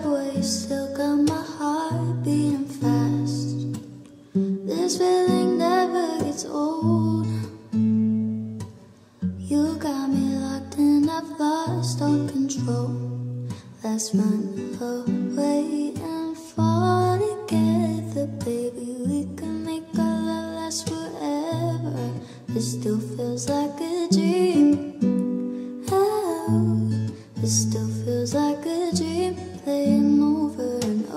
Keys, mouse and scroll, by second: 16.7 p, 17.8-19.0 drag, 17.8 s, 23.2 ctrl+shift+d, 24.9-27.0 typing.